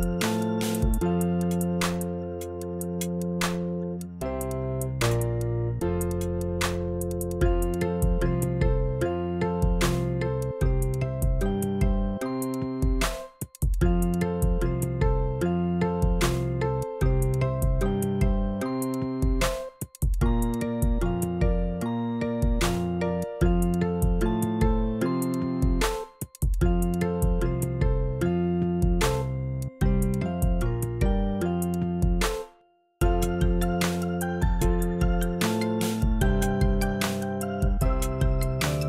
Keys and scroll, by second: 0.0 0, 24.7 4, 25.3 0.